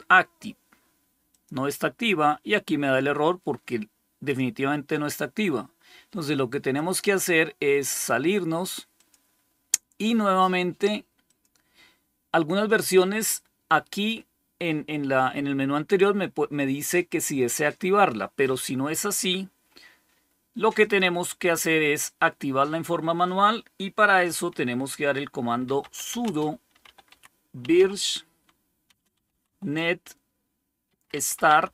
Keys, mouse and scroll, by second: 1.2 click, 4.1 click, 4.4 click, 6.6 click, 7.8 click, 8.8 click, 11.1 click, 20.7 click, 21.4 click, 25.3-31.7 typing.